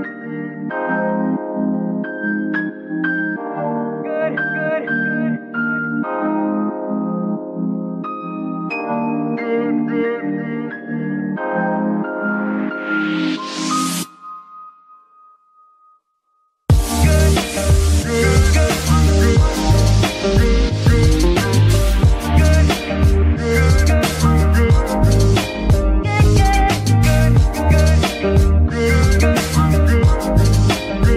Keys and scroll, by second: 27.2 KP_1.